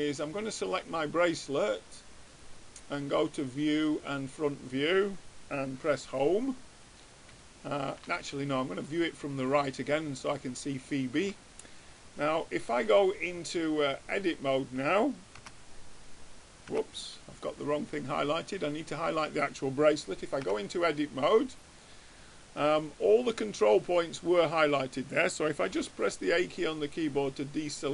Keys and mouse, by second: 1.1-4.3 drag, 5.9 Home, 8.4 middle click, 8.8-10.5 drag, 10.5 middle click, 15.7 Tab, 17.3 Tab, 21.1 Tab, 23.5-26.7 drag, 26.0 a, 26.5-27.9 middle drag.